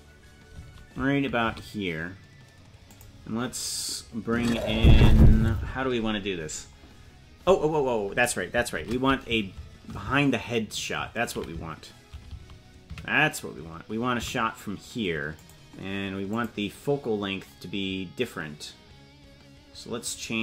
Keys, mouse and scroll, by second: 16.3-20.4 drag.